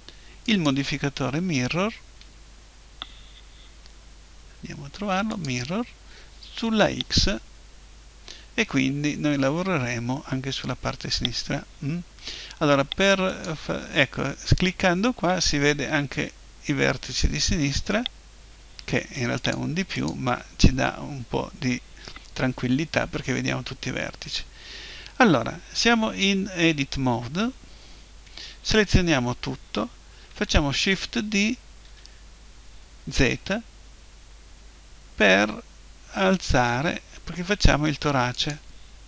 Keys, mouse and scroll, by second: 13.3-15.3 drag, 19.4-21.9 drag, 28.9 a, 30.8 shift+d, 38.5-39.0 drag.